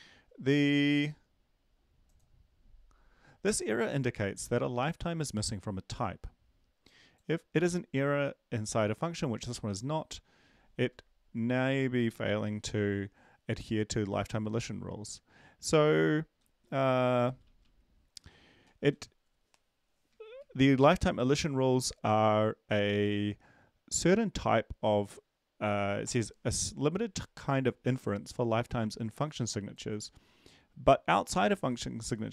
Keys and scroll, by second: 16.1 Down, 16.4 Down, 16.6 Down, 17.0 Down, 17.2 Down, 17.6 Down, 18.1 Down, 18.3 Down, 18.4 Down, 18.6 Down, 20.1 Down, 20.3 Down, 20.6 Down.